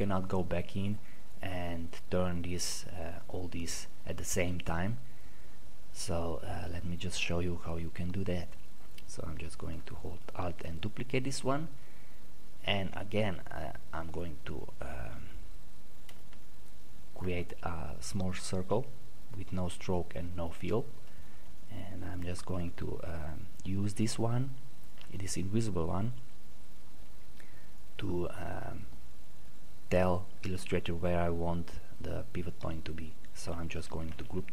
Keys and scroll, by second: 33.7 ctrl+g.